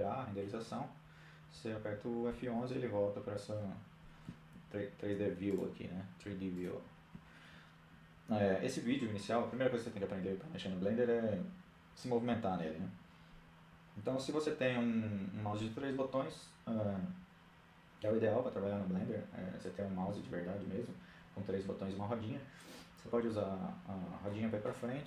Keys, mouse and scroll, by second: 0.0 F11, 3.0-4.6 drag, 22.4-24.2 middle drag, 24.9-25.0 scroll down 1.